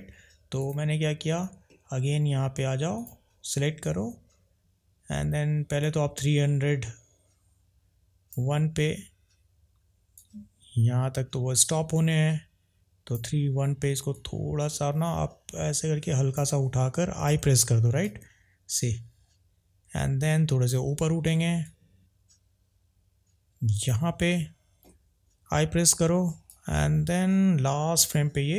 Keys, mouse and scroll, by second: 1.7 middle click, 2.9 click, 5.9 click, 10.2 drag, 14.2 click, 18.1 drag.